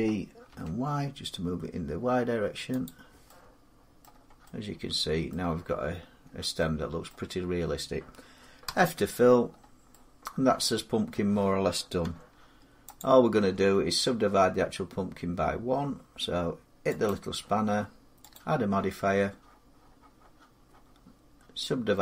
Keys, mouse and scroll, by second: 0.3 y, 2.6 click, 3.8 middle click, 3.9 middle click, 4.0 middle click, 5.1 middle click, 5.5 middle click, 5.7-6.0 scroll, 6.4 scroll, 6.9 middle click, 8.4 f, 9.2-9.7 scroll down 4, 10.9 middle click, 10.9 scroll down 1, 11.2-11.8 scroll, 11.8 Tab, 12.2 scroll down 4, 12.8 click, 13.2 Tab, 15.9 scroll, 16.8 click, 18.1 click.